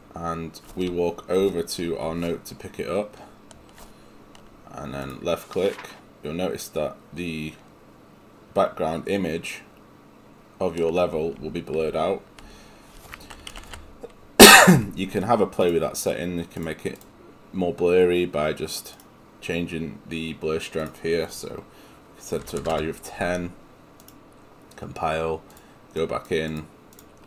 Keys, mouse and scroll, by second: 14.6 Escape, 16.6 click, 19.1 click, 22.8 Return.